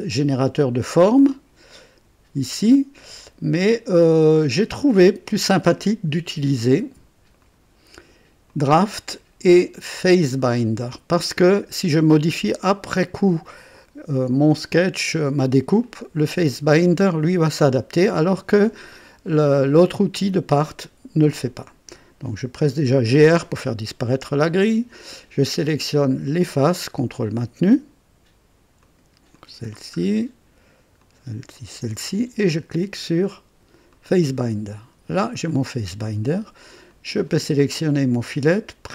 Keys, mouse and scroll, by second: 1.6 click, 7.3 click, 8.4 click, 12.9-13.6 drag, 15.8 click, 22.7-23.8 typing, 25.4 click, 26.6 ctrl+click, 27.1 ctrl+click, 27.9-28.6 typing, 28.7 click, 29.3 click, 29.9 scroll up 1, 30.9 click, 31.5 ctrl+click, 33.8 click, 36.8 click.